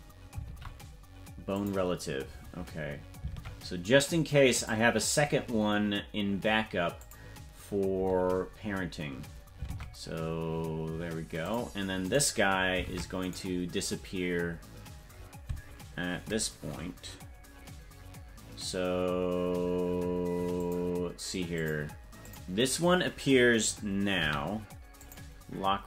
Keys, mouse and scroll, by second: 0.4 ctrl+p, 3.3 ctrl+Tab, 4.5 click, 6.9 click, 9.7 ctrl+Tab, 11.4 click, 12.1 right click, 12.8 ctrl+Tab, 13.3 right click, 20.6 click, 21.5 click, 22.2 click, 24.2 i.